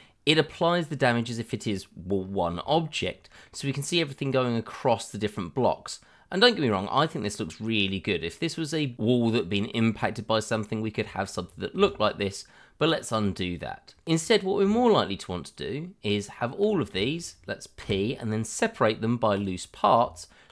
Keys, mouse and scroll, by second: 0.9 scroll down 1, 1.2 middle click, 2.2-2.6 scroll up 1, 2.7 shift+middle click, 2.8 middle click, 2.9 shift+middle click, 3.3 middle click, 4.8-5.3 scroll up 1, 5.3 middle click, 6.6 scroll down 1, 7.1 middle click, 8.7 middle click, 9.7 shift+middle click, 9.7 middle click, 9.8 shift+middle click, 11.7 ctrl+z, 13.6 middle click, 14.2 middle click, 14.6 Tab, 16.9 a, 17.8 p, 19.3 click, 20.0 Tab.